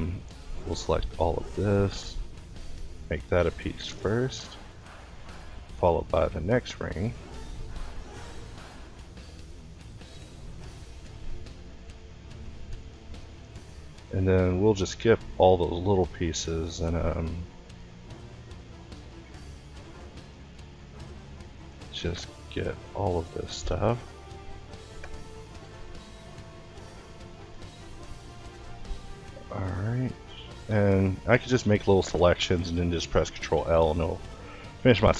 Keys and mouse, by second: 1.4 l, 1.8 l, 2.8 p, 3.9-8.2 typing, 9.9 l, 10.5 o, 11.4 Escape, 11.8 p, 13.0-16.0 typing, 17.1-24.8 middle drag, 29.2 click, 30.7 ctrl+i, 31.5 middle click, 33.3 p.